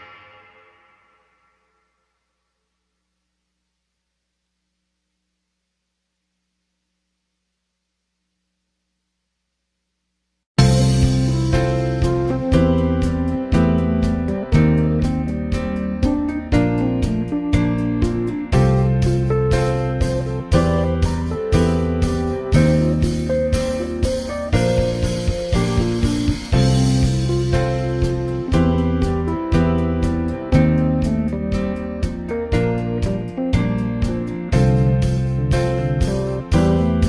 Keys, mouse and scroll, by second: 2.3-5.2 drag, 9.8-13.9 middle drag, 15.7 middle click, 17.0 click, 17.9 middle drag, 18.1-20.1 scroll up 2, 20.8 click, 21.6 click, 29.8 middle click.